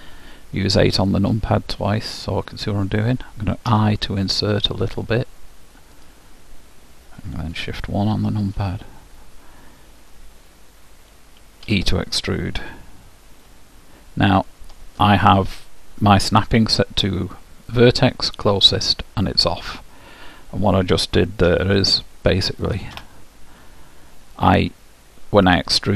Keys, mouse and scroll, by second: 0.9 KP_8, 1.6 KP_8, 3.9 i, 11.8 e, 21.6 g.